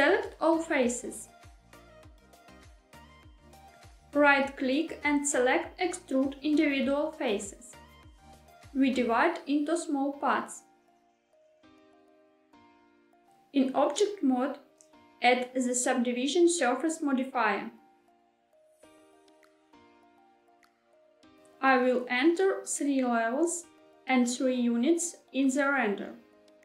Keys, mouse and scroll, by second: 1.9 a, 3.9-6.9 right drag, 6.9 click, 12.4 click, 13.7 Tab, 15.3 click, 17.3-21.0 drag, 24.6-26.6 drag.